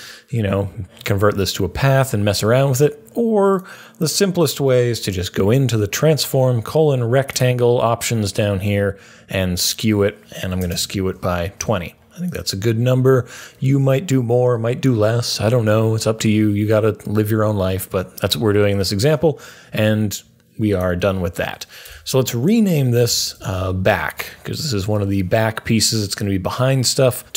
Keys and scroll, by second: 10.2-11.1 typing, 22.8-24.0 typing.